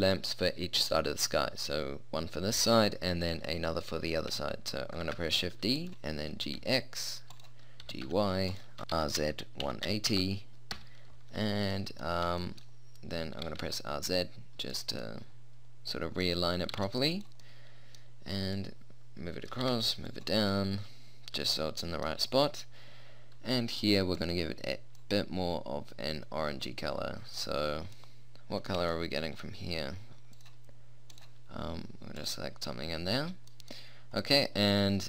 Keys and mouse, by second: 5.2 shift+d, 6.4 g, 7.9 g, 8.8 ctrl+z, 9.0 r, 12.0 middle click, 13.5 r, 15.2 middle click, 16.0 middle click, 16.2 middle click, 16.8 r, 19.6-20.6 drag, 19.7 g, 24.2-26.0 drag, 26.4-28.0 middle drag, 28.8 middle click, 30.4-33.6 drag, 34.5-35.0 middle drag.